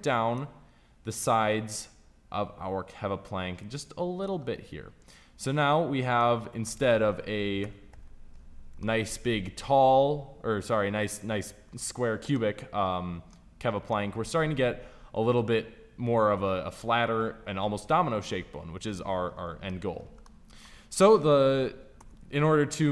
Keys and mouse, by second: 1.0 right click, 1.7-3.3 middle drag, 3.3 click, 7.5 KP_5, 7.8 z, 19.6 middle click, 21.9 KP_1, 22.4 KP_3.